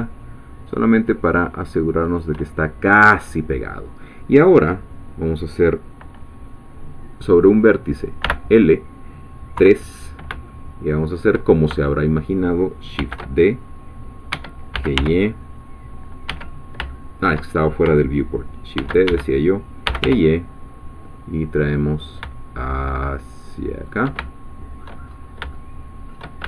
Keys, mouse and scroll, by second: 2.0 shift+click, 2.5-2.8 shift+scroll down 2, 2.9-8.2 middle drag, 8.2 l, 9.6 3, 10.5 shift+middle click, 11.5 shift+scroll down 2, 11.9 shift+middle click, 13.2 shift+d, 14.7 g, 15.1 y, 16.8 shift+Escape, 16.9 shift+middle click, 18.8-20.5 typing, 19.1 Escape, 23.8 shift+click, 24.2 shift+middle click, 25.1-25.5 shift+scroll up 2.